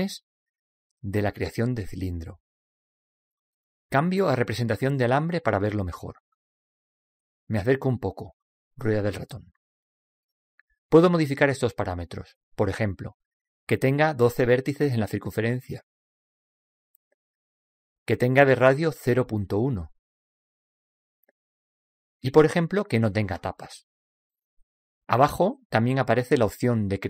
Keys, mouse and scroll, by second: 0.9 click, 6.0 click, 9.3-12.0 middle drag, 14.6 click, 18.8 click, 22.2-25.9 drag, 26.7 click.